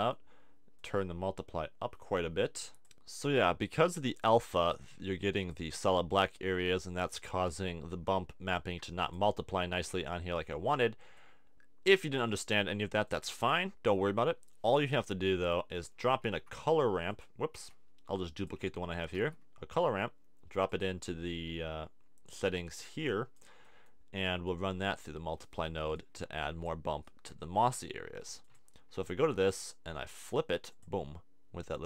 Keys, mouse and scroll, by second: 6.6 click, 16.2 shift+d, 17.6 x, 19.1 shift+d, 26.1 click.